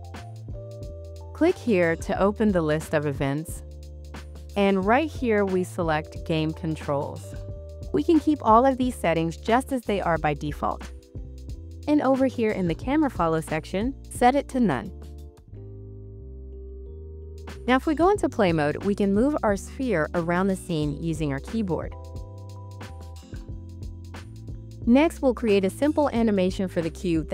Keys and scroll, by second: 20.8 s, 21.2 a, 21.9 w, 22.6 d.